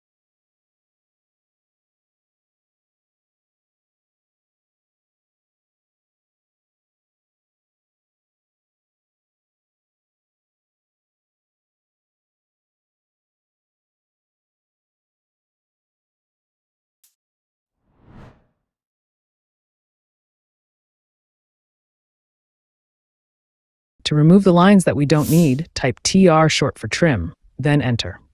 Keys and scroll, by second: 0.8 t, 0.9 a, 1.0 n, 1.8 space, 4.2 t, 4.3 a, 4.6 n, 5.1 space, 10.2 l, 10.3 space, 12.3 t, 12.5 a, 13.5 n, 14.2 space, 17.6 t, 17.7 a, 18.0 n, 18.6 space, 26.5 t, 26.6 r.